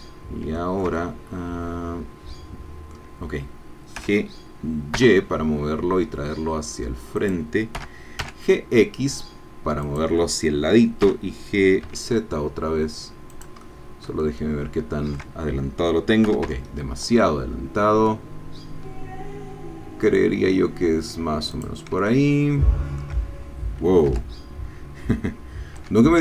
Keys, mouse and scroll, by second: 0.0 scroll down 2, 0.6-3.1 shift+drag, 4.0 g, 5.0 y, 7.2 click, 7.8 g, 8.2 x, 9.8 click, 11.0 g, 11.8 z, 13.3-15.3 drag, 16.3 g, 16.5 y, 21.6 click, 22.0-23.1 shift+middle drag, 24.0 g, 25.8 x.